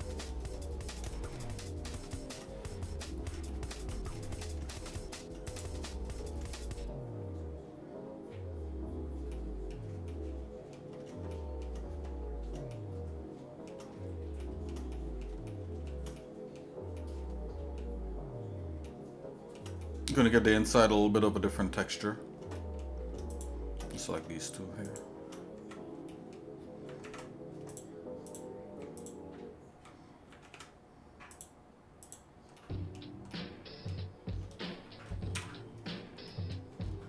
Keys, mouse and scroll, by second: 1.1-2.4 shift+middle drag, 2.9 scroll up 1, 2.9 scroll down 1, 3.5 shift+middle click, 4.1 middle click, 5.0 shift+middle click, 5.5 click, 9.3 shift+middle click, 10.1 shift+middle click, 11.3 shift+middle click, 12.7-13.8 shift+middle drag, 14.4 shift+middle click, 14.9 middle click, 15.5 shift+middle click, 16.2 middle click, 17.0 shift+middle click, 18.9 shift+middle click, 19.8 middle click, 21.0 shift+middle click, 22.6 shift+middle click, 23.3 shift+click, 23.9 middle click, 24.9 shift+click, 25.6 Tab, 26.1 middle click, 27.0 ctrl+Tab, 28.3 click, 29.0 alt+shift+click, 30.5 ctrl+Tab, 32.1 click, 32.6 shift+middle click, 33.3 shift+middle click, 35.4 KP_Divide, 36.3 middle click, 36.8-37.0 scroll up 3.